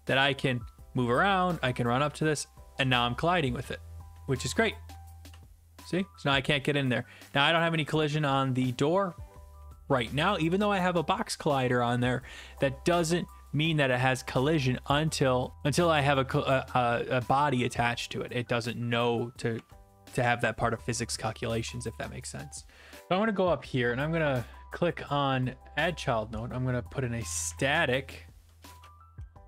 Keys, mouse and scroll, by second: 1.0-10.0 typing, 13.6-15.8 typing, 14.9 right click, 19.6 alt+F4, 23.9-24.9 right drag, 25.9-27.2 drag, 26.9-29.4 typing.